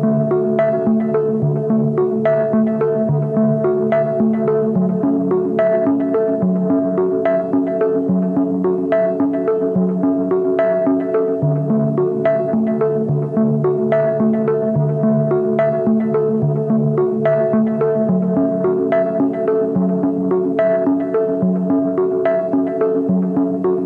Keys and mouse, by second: 1.6 alt+shift+click, 2.1 alt+shift+click, 2.6 alt+shift+click, 3.0 x, 4.3 ctrl+z, 4.9 a, 5.2 Tab, 6.2 KP_Divide, 7.0 h, 7.3 ctrl+s, 7.5 click, 7.7 Tab, 8.1 middle click, 8.4 a, 8.9 middle click, 9.7 alt+click, 10.2 alt+shift+click, 10.8 middle click, 11.3 x, 13.4 shift+middle click, 15.6-17.1 middle drag, 18.2 alt+shift+click, 18.7 x, 20.3 ctrl+z, 21.5 middle click, 22.5 shift+middle click, 23.0 click, 23.2 alt+click, 23.7 alt+shift+click.